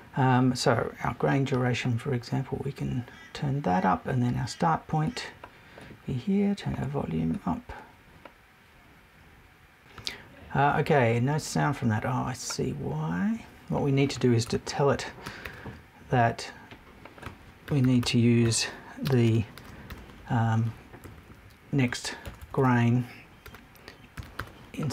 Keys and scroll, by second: 14.5 BackSpace, 15.2 super+BackSpace, 21.0 Left, 21.9 Right, 22.2 BackSpace.